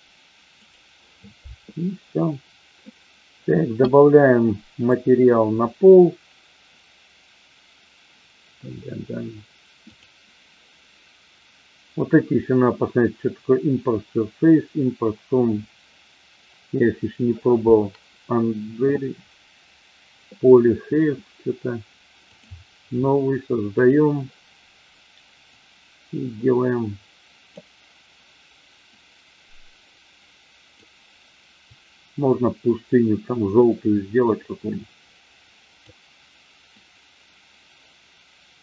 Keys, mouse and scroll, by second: 22.5 click, 23.8 click.